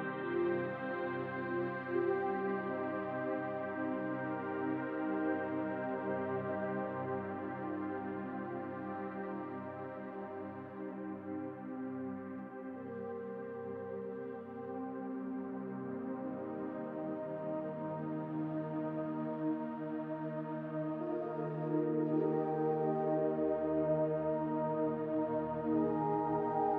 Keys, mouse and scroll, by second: 1.2-1.5 scroll down 1, 1.5 middle click, 5.2 middle click, 7.2 shift+middle click, 8.0-8.4 scroll down 1, 8.4 middle click, 9.8 middle click, 10.1 shift+middle click, 11.9 click, 12.3 shift+click, 12.7 shift+click, 13.7 Delete, 15.9 middle click, 17.3-17.9 scroll up 2, 17.7 click, 17.9 middle click, 18.6 click, 24.8 middle click, 25.5 middle click, 26.6 ctrl+a.